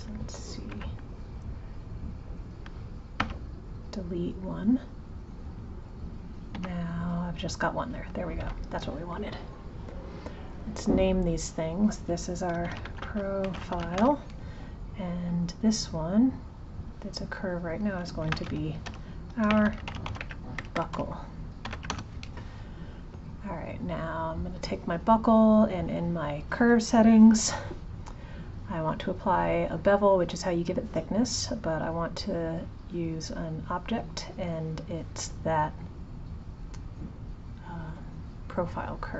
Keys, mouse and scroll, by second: 0.7 1, 2.0 click, 5.6 click, 9.9 click, 11.5-14.6 drag, 15.2 click, 16.5 click, 17.3 click, 17.5-20.7 drag, 20.8 BackSpace, 21.0 BackSpace, 24.4 click, 26.3 click, 31.3 click, 33.7-36.8 drag.